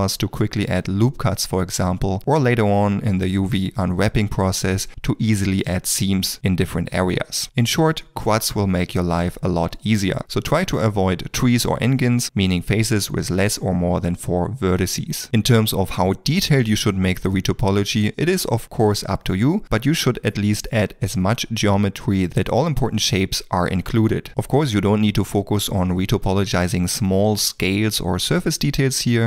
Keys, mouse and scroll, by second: 0.2-3.1 typing, 0.4 shift+click, 0.6 middle click, 2.6 ctrl+middle click, 2.9 shift+click, 3.0 shift+middle click, 3.4 ctrl+r, 3.8 middle click, 3.8 ctrl+middle click, 4.2 middle click, 4.4 ctrl+click, 4.6 e, 5.2 middle click, 5.3 shift+middle click, 5.5 ctrl+middle click, 5.8 middle click, 6.0 f, 6.4 ctrl+z, 6.9 f, 7.9 shift+middle click, 8.9 g, 9.7 f, 10.2 g, 10.8 f, 12.1 middle click, 12.5 ctrl+z, 12.6 f, 13.0 g, 13.4 middle click, 13.7 g, 14.0 middle click, 14.4 ctrl+r, 14.8 shift+middle click, 15.0 middle click, 15.4 f, 16.2 middle click, 16.8 shift+click, 17.4 middle click, 17.4 shift+middle click, 17.6 ctrl+middle click, 17.8 e, 18.6 e, 18.8 middle click, 18.9 ctrl+middle click, 19.1 x, 19.6 f, 20.1 ctrl+z, 20.8 g, 21.4 f, 21.8 ctrl+r, 22.2 shift+click, 22.3 ctrl+r, 22.4 f, 22.6 ctrl+middle click, 22.7 middle click, 23.1 shift+middle click, 23.2 ctrl+middle click, 23.3 shift+middle click, 23.5 ctrl+middle click, 23.7 ctrl+r, 24.0 middle click, 24.1 ctrl+r, 24.5 middle click, 25.2 shift+middle click, 25.7 ctrl+middle click, 25.9 2, 26.1 shift+click, 26.3 middle click, 26.3 d, 26.5 click, 26.9 click, 27.2 click, 28.2 shift+click, 28.3 shift+middle click, 28.4 d, 28.6 click, 28.9 click.